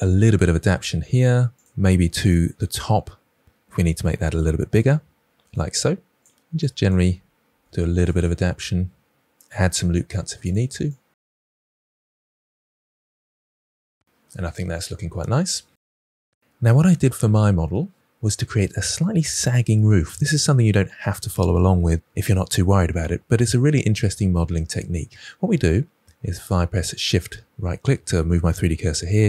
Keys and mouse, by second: 2.3 KP_1, 2.8 Tab, 3.1 click, 3.5 g, 4.1 click, 4.5 g, 4.7 click, 4.7 Tab, 5.4 Tab, 5.8 KP_1, 6.3 g, 6.5 click, 6.6 click, 6.7 g, 7.0 click, 7.4 ctrl+r, 7.6 click, 7.6 click, 8.5-11.1 typing, 8.7 click, 8.9 click, 9.7 click, 9.9 click, 10.2 click, 10.8 click, 11.3 click, 11.4 Tab, 12.3 Tab, 12.6 s, 12.7 click, 13.5 click, 13.6 g, 13.8 click, 13.9 Tab, 26.8 shift+right click.